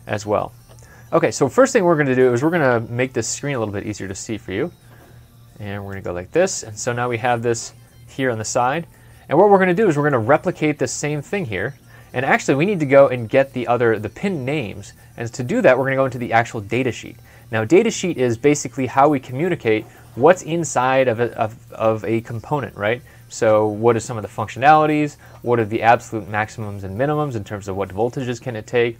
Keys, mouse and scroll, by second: 1.6 middle click, 2.9 super+Left, 8.7 super+Left, 9.0 middle click.